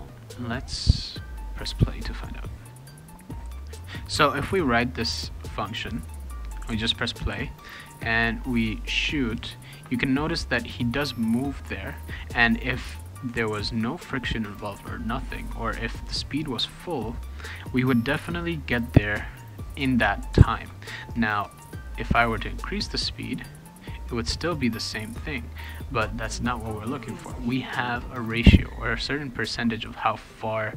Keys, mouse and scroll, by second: 2.7 click, 3.2-4.7 typing, 3.3 click, 4.5-6.9 right drag, 6.0 click, 7.3 d, 9.0 shift+d.